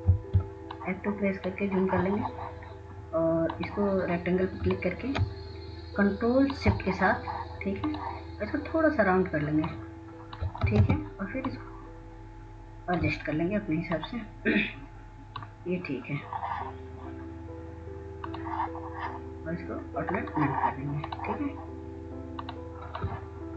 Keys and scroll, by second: 0.4 F2, 2.0 F2, 12.7 ctrl+space.